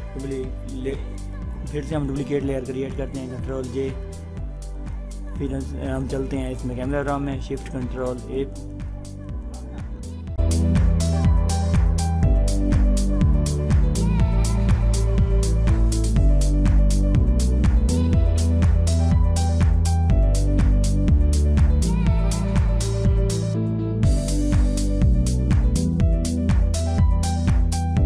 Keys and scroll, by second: 3.4 ctrl+j, 7.9 ctrl+shift+a.